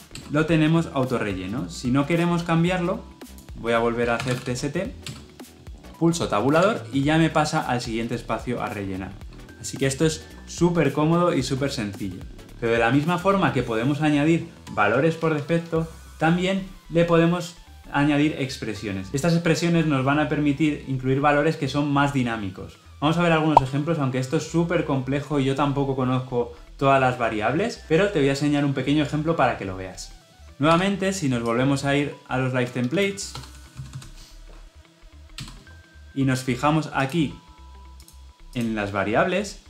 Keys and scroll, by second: 5.0 Return, 30.5 Escape.